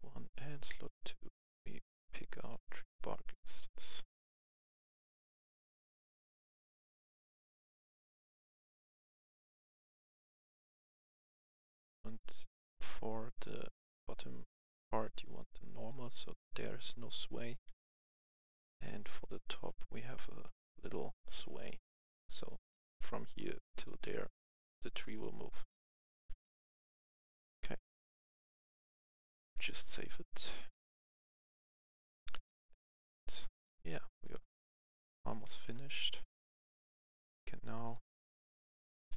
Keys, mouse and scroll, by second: 2.4 click, 4.1-5.0 scroll down 1, 5.0 click, 6.3 right click, 6.4 a, 6.6 w, 7.7 w, 7.9 d, 9.5-12.2 right drag, 10.4 s, 10.7 s, 11.0 d, 13.3 click, 17.3 right click, 17.7 w, 18.1 w, 18.7 w, 20.2 w, 21.6 typing, 21.6 right click, 22.9-23.7 typing, 29.5 click, 31.6 click, 34.6 click, 35.3 right click, 36.2-39.1 drag.